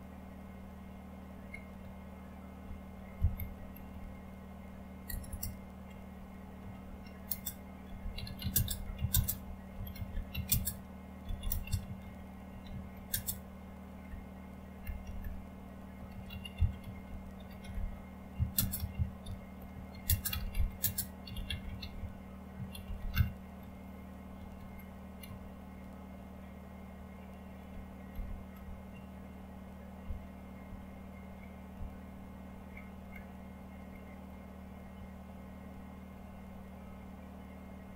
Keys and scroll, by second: 0.0-25.8 typing, 27.9-32.8 typing, 33.1-36.1 Down, 37.6-37.9 typing.